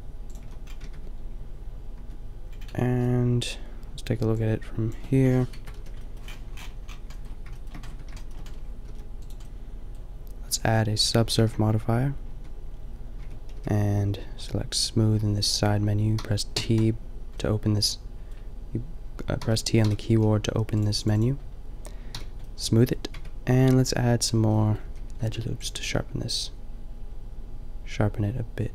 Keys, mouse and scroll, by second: 0.4 a, 0.8 Tab, 1.9 Tab, 5.6 KP_Decimal, 5.7 KP_5, 7.9 Tab, 8.8 s, 11.3 ctrl+3, 12.2 Tab, 13.2 Tab, 13.6 t, 16.2 t, 16.5 t, 19.4 t, 19.8 t, 22.1 t, 22.7 click, 23.2 Tab, 24.4 a, 24.9 a, 25.2 ctrl+r.